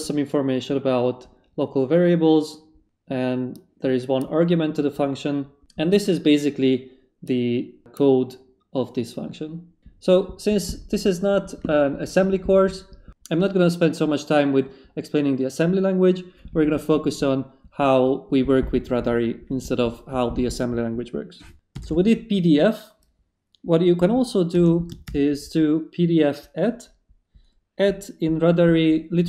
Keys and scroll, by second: 21.5-22.8 typing, 24.5 space, 25.0 shift+2.